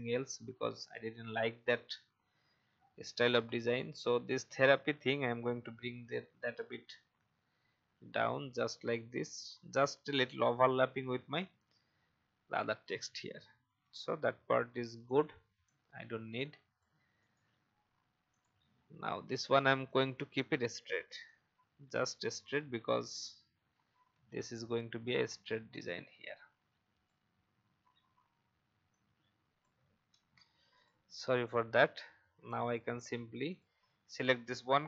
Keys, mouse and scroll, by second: 0.0 shift+scroll up 1, 1.7 Down, 2.2 Down, 2.3 Down, 11.4-11.7 alt+scroll down 1, 12.0-15.0 alt+scroll up 1, 15.0-17.1 drag, 17.2 right click, 18.3 click, 19.5 shift+click, 21.3 shift+click, 22.6 shift+Down, 23.0 shift+Down, 25.2-30.0 drag, 30.1 ctrl+z, 30.7-33.3 drag.